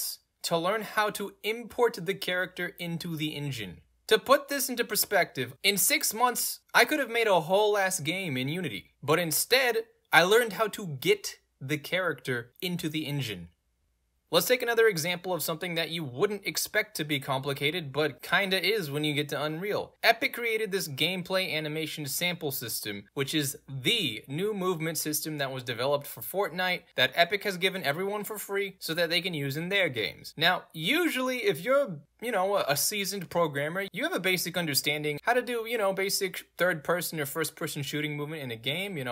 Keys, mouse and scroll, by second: 3.8 click, 20.9 w, 21.6 right click, 21.8 w, 23.3 shift+w, 28.2 Caps_Lock, 29.3 w, 31.5 a, 32.4 click, 38.9 click.